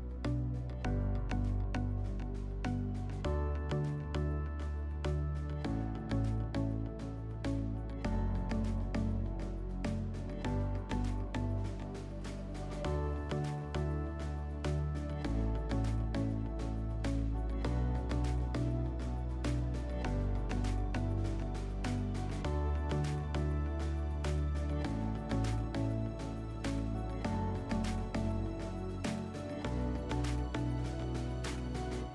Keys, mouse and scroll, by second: 0.7-1.6 drag, 3.0 shift+click, 3.8 click, 5.2 click, 6.1 click, 6.2 click, 6.5 5, 7.0 click, 7.2 click, 7.3 5, 8.3 click, 9.8 click, 14.9 click, 17.6 alt+middle click, 19.1 alt+middle click, 20.0 click, 24.4 click, 25.3 scroll, 27.3 click, 28.5 right click, 31.5 click.